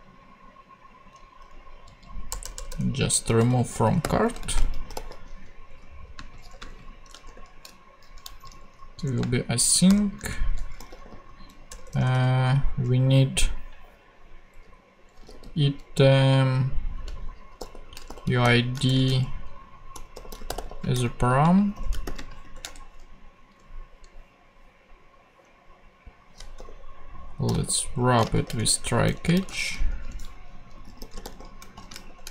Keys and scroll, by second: 1.8 Left, 2.3 BackSpace, 3.3 alt+BackSpace, 3.7-7.2 typing, 8.3 shift+Left, 8.4-11.7 typing, 9.0 Return, 10.2 Right, 15.0-15.9 typing, 17.3-22.4 typing, 21.4 super+space, 22.6 shift+Return, 23.7 Return, 26.6-29.4 typing, 28.6 shift+Return, 29.1 Down, 29.9 Return, 30.5-32.3 typing.